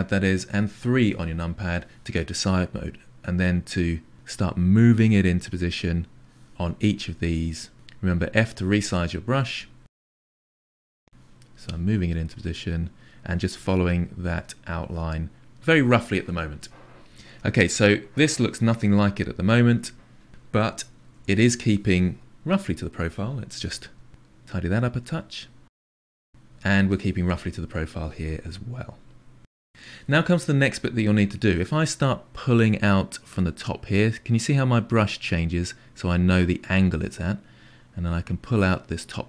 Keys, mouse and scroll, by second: 0.6 KP_3, 2.7-8.8 drag, 9.0-10.5 drag, 10.7-17.0 drag, 17.0-20.3 middle drag, 20.7 KP_1, 22.6 f, 23.0 click, 24.2 click, 25.7 KP_3, 27.4-39.2 drag.